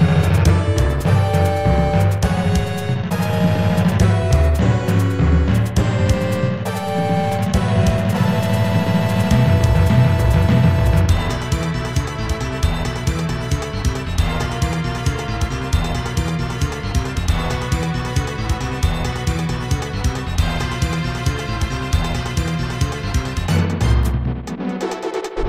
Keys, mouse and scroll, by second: 0.2 Return, 0.7 ctrl+z, 5.0-6.4 typing, 6.8 scroll down 1, 14.2 ctrl+z, 18.9 scroll up 2, 24.6 scroll down 2.